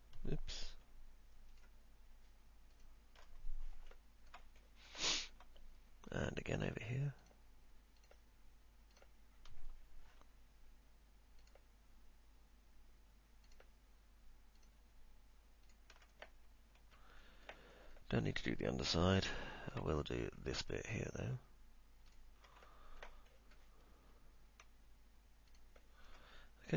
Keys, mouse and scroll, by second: 0.7 ctrl+z, 1.7 ctrl+click, 2.8 ctrl+click, 4.2 alt+middle click, 4.8 middle click, 5.3 alt+middle click, 9.2 ctrl+click, 10.3 ctrl+z, 16.3 middle click, 19.2 alt+middle click, 20.2 middle click, 22.8 alt+middle click, 23.5 middle click, 25.7 ctrl+click.